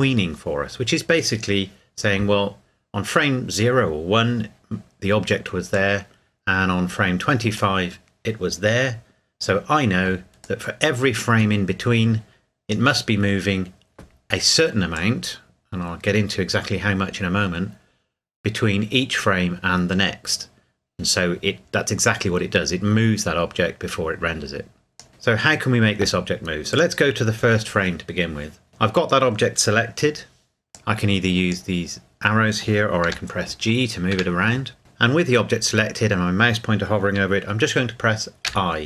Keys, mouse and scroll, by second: 5.7 click, 10.4 click, 12.2-12.7 drag, 14.9 click, 17.9-18.5 drag, 26.7 click, 30.7 click, 33.1 g, 34.1 Escape, 38.4 i.